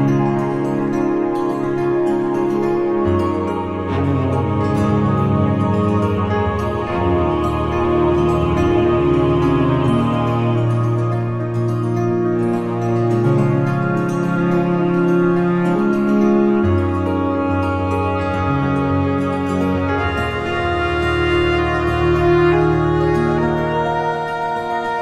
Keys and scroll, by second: 0.3 t, 5.8 ctrl+Return, 6.3 Delete, 7.0 t, 8.5 shift+j, 9.4 u, 10.3 n, 12.0 ctrl+Return, 14.4 ctrl+t, 16.2 ctrl+z, 20.6 Return, 22.3 3, 23.0 ctrl+Return, 23.7 ctrl+t.